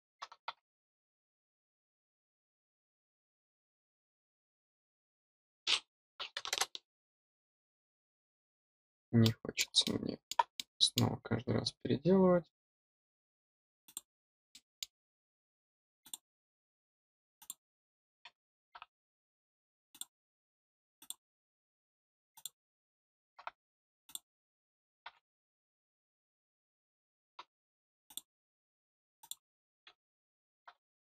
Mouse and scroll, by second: 8.8 middle click, 9.2 middle click, 9.8 middle click, 10.5 middle click, 13.8 click, 14.4 middle click, 16.0 click, 17.3 click, 19.8 click, 20.9 click, 22.3 click, 24.0 click, 28.0 click, 29.1 click.